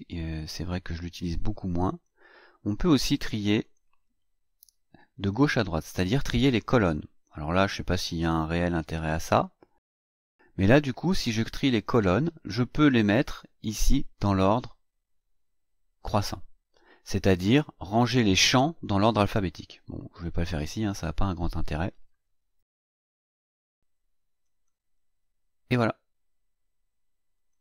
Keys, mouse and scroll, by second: 1.8 click, 3.6 click, 6.8 click, 8.7 click, 11.6 click, 12.7-13.5 drag, 20.2-21.5 drag, 24.4 click, 27.3 click.